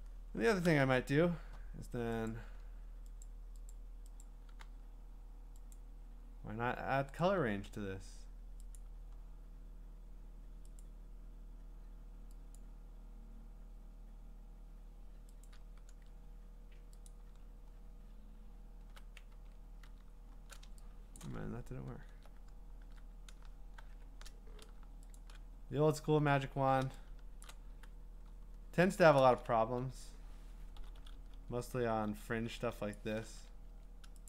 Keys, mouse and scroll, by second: 2.6 click, 2.6-3.7 scroll, 3.7 click, 4.6 w, 5.7 click, 7.2 click, 10.8 click, 12.6 click, 15.4 click, 17.1 click, 17.4-19.0 scroll, 19.3 ctrl+z, 20.0 scroll down 10, 20.1 scroll up 6, 21.2 click, 21.4 scroll up 7, 21.6-22.1 scroll, 22.8 w, 23.8 shift+w, 25.2 shift+click, 25.8-26.9 ctrl+scroll, 27.4 click, 27.7 q, 28.5-28.9 scroll, 29.6 b, 30.8-32.6 typing, 32.9 click, 33.7 x.